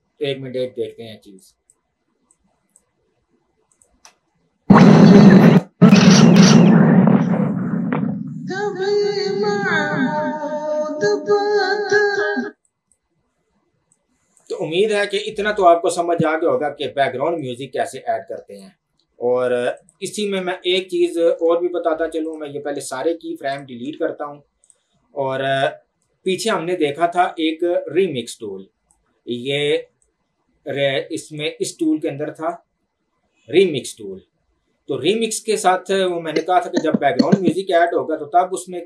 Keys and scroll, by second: 4.5 space, 12.5 space, 20.5 Delete, 22.7 Delete, 24.0 Delete.